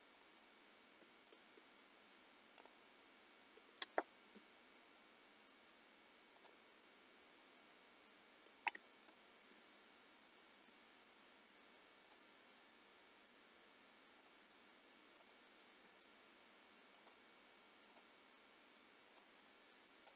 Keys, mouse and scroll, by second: 0.4 middle click, 1.3 middle click, 2.6 click, 2.9 middle click, 4.3 r, 6.8 middle click, 7.6 middle click, 9.1 shift+middle click, 10.3 shift+middle click, 10.7-12.0 scroll up 4, 11.1 shift+middle click, 12.0 click, 12.8 middle click, 14.2 shift+click, 14.5 middle click, 15.2 shift+click, 16.0 middle click, 17.0 shift+click, 17.9 shift+click.